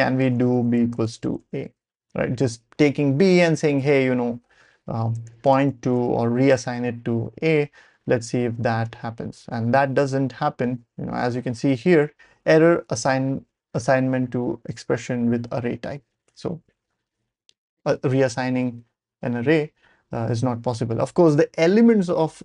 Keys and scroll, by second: 0.0-1.9 typing, 5.1 Escape, 5.2-6.3 typing, 7.3 Page_Up, 8.8 Return.